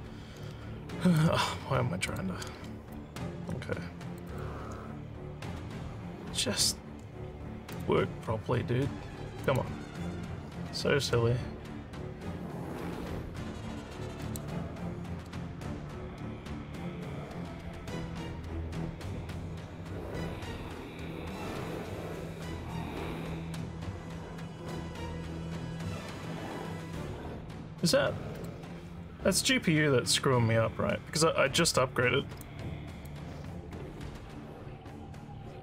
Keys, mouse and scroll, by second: 2.1 click, 2.9-4.1 alt+drag, 4.2 alt+click, 7.7 click, 9.4 click, 14.2 click, 28.3 click.